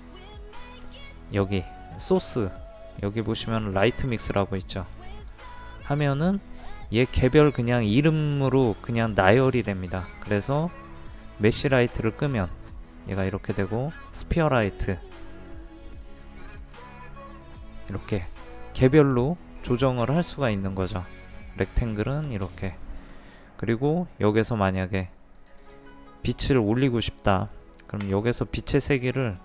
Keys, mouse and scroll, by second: 28.0 KP_5.